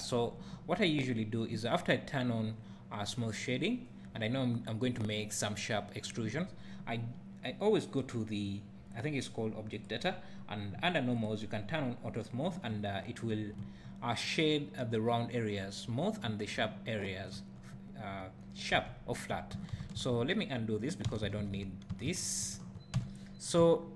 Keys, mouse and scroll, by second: 3.2-9.7 right drag, 9.7 click, 11.2 click, 12.2 click, 12.7 `, 18.7 Tab, 19.7 ctrl+x, 21.1 ctrl+z, 23.0 Tab, 23.2 scroll down 1, 23.6 `.